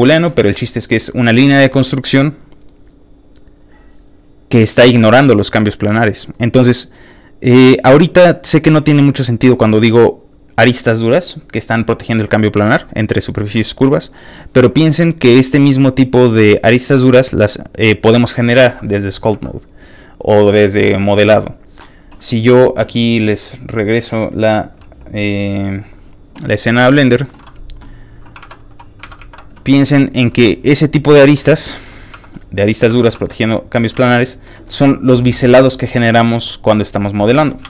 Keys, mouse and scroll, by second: 18.6 alt+Tab, 23.4 alt+click, 25.8 alt+click, 26.8 click, 27.3 Escape, 28.4 alt+Tab, 29.0 alt+Tab, 29.2 alt+Tab, 30.0 alt+middle click, 30.3 shift+middle click, 30.9 alt+shift+click, 31.1 shift+middle click, 31.7 shift+middle click, 32.1 scroll up 1, 32.1 Tab, 32.3 middle click, 33.1 shift+middle click, 33.3 scroll down 1, 33.4 middle click, 33.9 alt+shift+z, 34.1 middle click, 34.5 shift+middle click, 34.7-37.1 middle drag, 37.4 shift+middle click, 37.6 alt+shift+z.